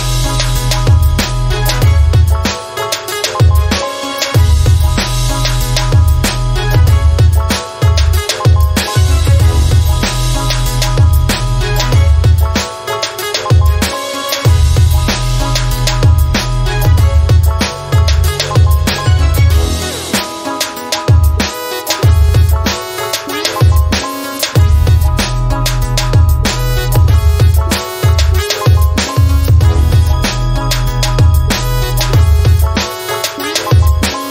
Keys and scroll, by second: 1.0-2.3 typing, 2.7 Return, 5.0 m, 16.6 typing, 18.4 m, 25.6 0, 30.1-31.3 typing, 32.0 Return.